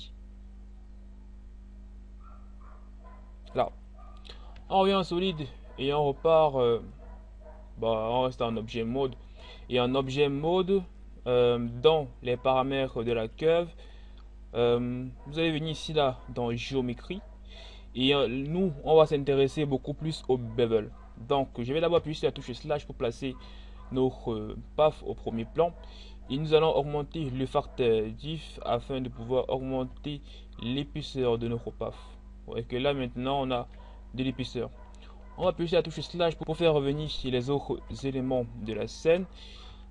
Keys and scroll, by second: 4.1 z, 37.4 1, 39.7 z.